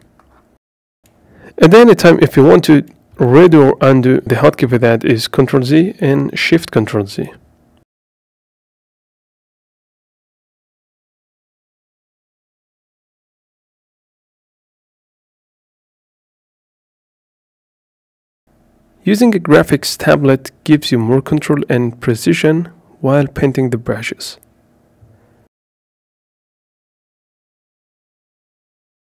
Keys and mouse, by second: 5.4 shift+x, 6.3 shift+x, 6.9 shift+x, 12.0 click, 14.3 shift+x, 18.5 click, 19.2 b, 20.6 click, 22.7 shift+f, 24.1 right click, 24.6 f, 25.4 f, 26.0 right click, 26.8 f, 27.0 shift+x, 27.7 right click, 28.5 f.